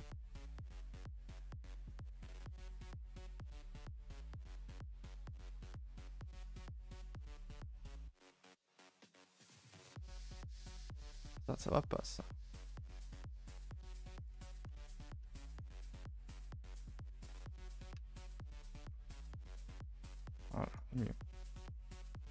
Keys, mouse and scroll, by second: 0.1-1.3 middle drag, 1.3 KP_7, 2.0 shift+middle click, 2.2-2.6 scroll up 2, 2.6 click, 2.7 g, 3.5 click, 3.8 g, 5.2 click, 5.4 g, 6.1-8.0 scroll up 9, 6.3 shift+middle click, 7.2 shift+middle click, 8.0-9.5 typing, 8.3-8.7 scroll up 2, 8.7 click, 9.7 click, 9.9-13.2 right drag, 13.2 ctrl+z, 13.5-14.5 right drag, 14.5 1, 14.9 click, 15.2 shift+click, 15.5-18.0 right drag, 18.0 a, 18.1 a, 18.3-18.8 scroll down 9, 18.8-19.6 scroll up 4, 19.6-20.4 scroll down 5, 20.4-22.3 shift+middle drag.